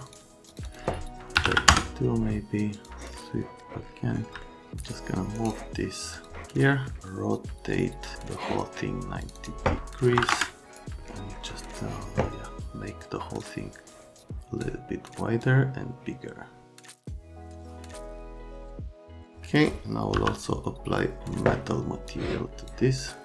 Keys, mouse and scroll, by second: 0.1 click, 0.5 click, 0.6 click, 1.3 KP_3, 1.4 KP_2, 1.7 KP_Enter, 2.7 click, 4.4 alt+middle click, 4.7 click, 5.3 scroll, 6.1 click, 8.0 click, 9.2 click, 9.3 click, 10.1 KP_9, 10.2 KP_0, 10.3 KP_Enter, 10.6 click, 11.3 click, 11.6 middle click, 13.4 click, 15.4 click, 17.3 alt+middle click, 18.7 middle click, 20.1 m.